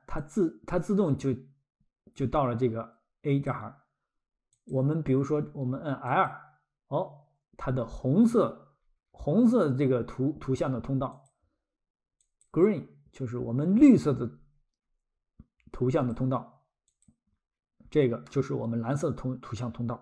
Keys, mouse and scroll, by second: 0.2 click, 4.6 click, 7.7-8.6 scroll, 11.1 click, 13.8-14.3 scroll, 16.0 click, 17.8-18.3 scroll, 18.3 middle click.